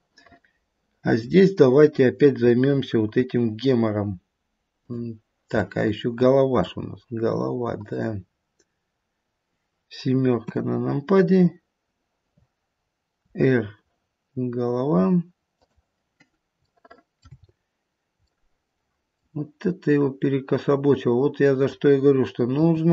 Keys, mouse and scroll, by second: 0.1 middle click, 1.0 middle click, 1.4-1.8 scroll down 2, 3.0 KP_1, 4.7 click, 5.6 middle click, 6.0 middle click, 7.7 click, 10.5 KP_7, 11.1-13.1 scroll down 1, 13.2 r, 16.6 shift+middle click, 17.1 shift+middle click, 17.3-18.0 scroll up 2, 18.0-18.4 scroll up 1, 18.4 shift+middle click, 19.2 shift+middle click, 19.6-20.5 scroll up 2, 21.5 click, 22.5 r.